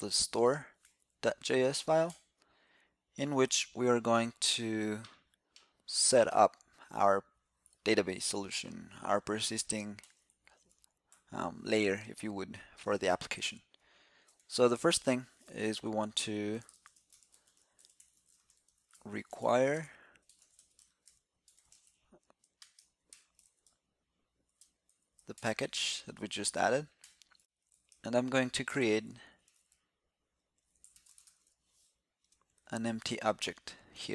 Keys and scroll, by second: 0.7 super+p, 8.1 super+Up, 32.5 alt+c.